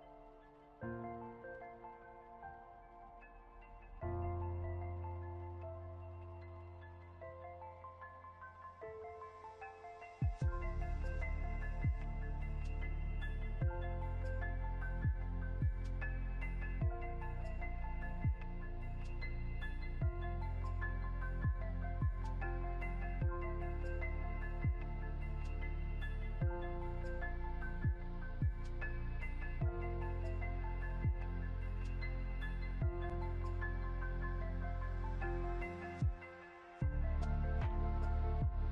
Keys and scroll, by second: 16.5 ctrl+c, 16.7 ctrl+f, 27.2 ctrl+z, 31.2 ctrl+0.